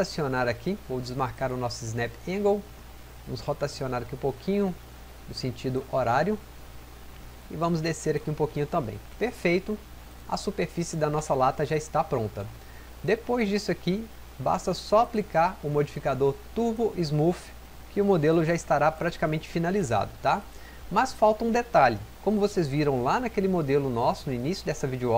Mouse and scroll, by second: 1.3 click.